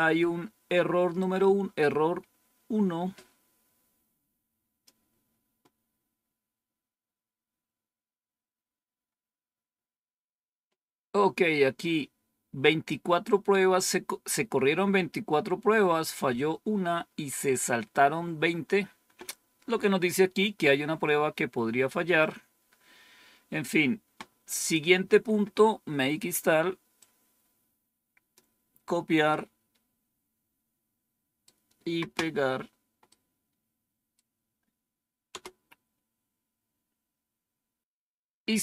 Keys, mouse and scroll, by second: 1.1-4.8 drag, 21.6-22.9 scroll down 2, 24.5 click, 26.8-29.1 drag, 29.2-31.4 right drag, 33.0-34.1 right drag, 35.2 Return.